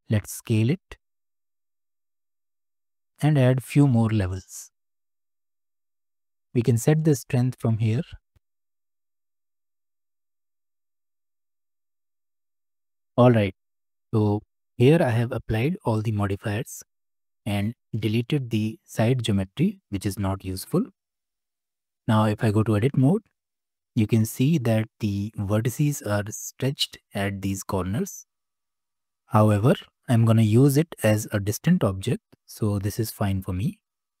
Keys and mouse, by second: 0.2 s, 4.5 click, 5.0 click, 8.6-11.7 shift+drag, 20.7-22.0 drag, 22.0 Tab, 22.9 shift+middle click, 23.4 click, 23.9-24.9 middle drag, 28.0 middle click, 31.5 Tab, 32.8-34.2 drag.